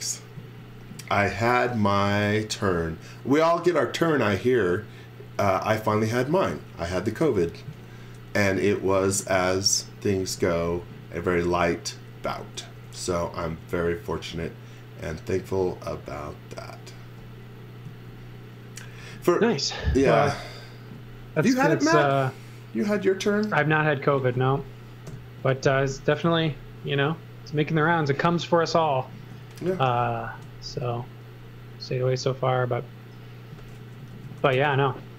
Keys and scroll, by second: 0.4 z, 10.3 x, 11.4 space, 12.8 f, 17.9 z, 18.9 x, 19.9 space, 25.1 BackSpace, 26.3 z, 29.3 x, 29.7 z, 30.7 space, 34.1 super+z, 34.4 space, 35.0 s.